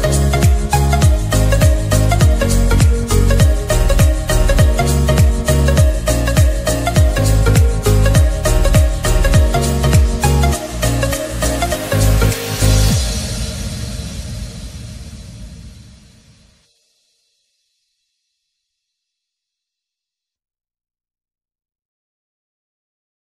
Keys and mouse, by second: 0.1 Right, 1.8 click, 2.3 Up, 4.6 Left, 7.5 Down, 13.3 click, 14.3 click, 16.8 ctrl+z, 18.2 click.